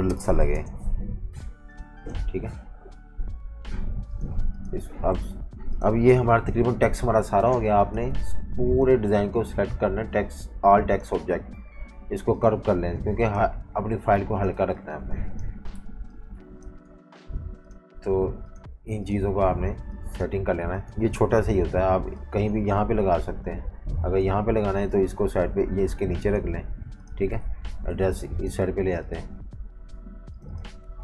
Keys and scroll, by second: 0.0-0.9 typing, 6.1 super+-, 6.3 super+-, 7.5 space, 14.5 typing, 15.7-17.4 typing, 20.8 super+g, 24.4 super+3, 27.4 alt+super+3, 27.9-29.1 typing.